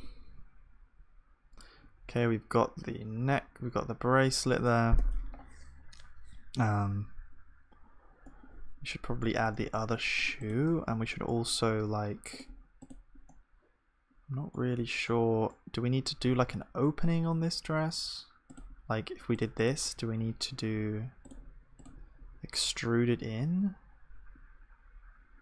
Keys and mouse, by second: 6.4-10.7 middle drag, 10.7 Tab, 13.4 click, 13.7 click, 14.1-15.1 drag, 15.1-19.3 middle drag, 16.4 ctrl+r.